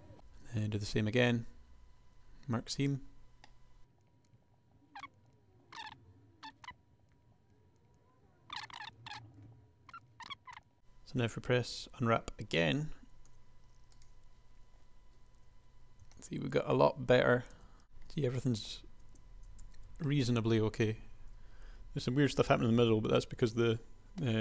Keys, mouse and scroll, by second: 0.9 ctrl+e, 4.7 ctrl+e, 5.6 ctrl+r, 6.4 ctrl+e, 7.3 KP_1, 8.6 ctrl+e, 9.2 ctrl+e, 9.6 ctrl+e, 10.3 ctrl+e, 10.5 KP_1, 10.7 a, 10.8 a, 13.2 u, 16.0 Tab, 17.6 Tab, 19.8 Tab, 21.8 KP_1, 23.0 Tab, 23.4 Tab.